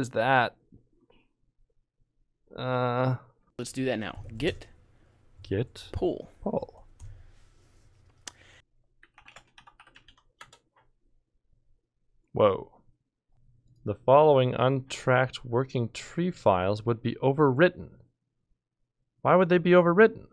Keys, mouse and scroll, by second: 3.4 l, 8.5 click, 8.5-10.5 typing.